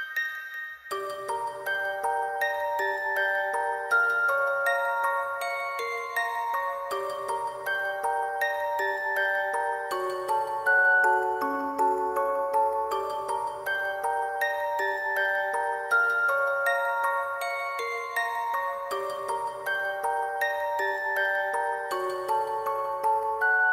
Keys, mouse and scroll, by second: 0.3 alt+click, 0.5 ctrl+click, 0.6 alt+click, 0.8 shift+click, 0.9 alt+click, 1.5 alt+click, 2.1 alt+click, 3.3 shift+click, 3.4 alt+shift+click, 4.1 shift+click, 7.1 alt+click, 7.5 w, 10.9 alt+click, 12.9 alt+click, 15.4 alt+click, 15.6 shift+click, 15.7 alt+click, 21.7 double click, 22.3 ctrl+z.